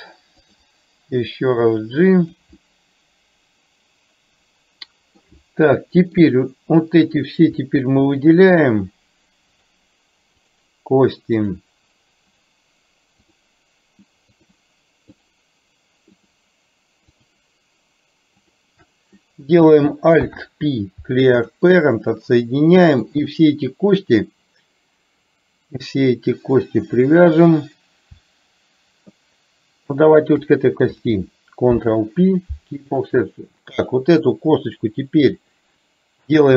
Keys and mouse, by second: 1.5 click, 2.7-5.4 middle drag, 5.7 middle click, 7.1 click, 8.2 shift+click, 9.6 shift+click, 11.5 shift+click, 12.4 shift+click, 13.4 shift+click, 14.5 shift+click, 17.2 shift+click, 20.2 alt+p, 22.2-23.4 middle drag, 30.1 shift+click, 31.9 ctrl+p, 33.9 click.